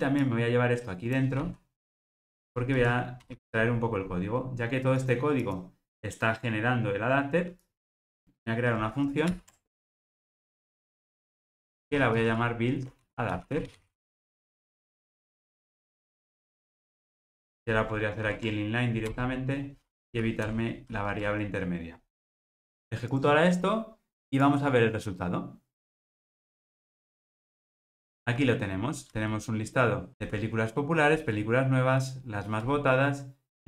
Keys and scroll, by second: 1.5 super+x, 9.4 alt+super+m, 18.3 alt+super+n, 23.2 ctrl+r.